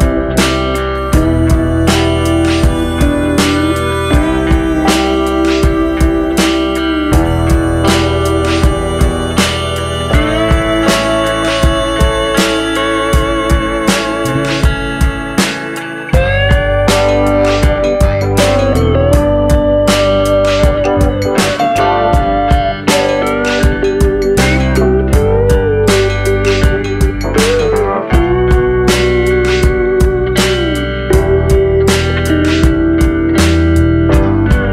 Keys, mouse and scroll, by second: 2.9 g, 4.5 click, 4.8 g, 6.5 click, 7.0 g, 8.2 middle click, 9.9-10.3 scroll down 3, 10.3 Tab, 10.9-11.2 scroll down 3, 11.2 middle click, 12.1 click, 13.2 click, 13.8 click, 15.1 click, 16.6 shift+h, 17.8 alt+h, 18.3 shift+h, 20.1 shift+h, 21.0-23.0 scroll up 5, 23.0-23.4 scroll up 1, 23.4 click, 25.6 middle click, 26.8 shift+middle click, 27.4-28.1 scroll up 1, 28.1 Tab, 28.5 middle click, 29.8-30.5 scroll up 3, 31.1 shift+middle click, 31.4 scroll up 2, 32.6 middle click.